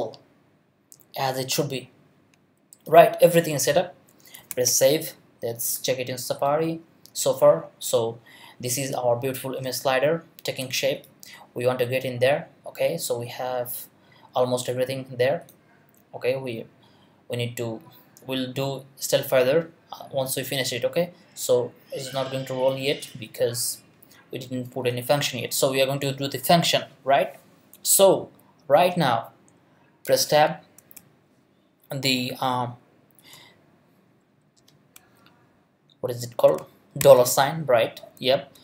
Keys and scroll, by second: 4.5 super+s, 30.1 Tab, 30.9 shift+Tab, 37.0 shift+4.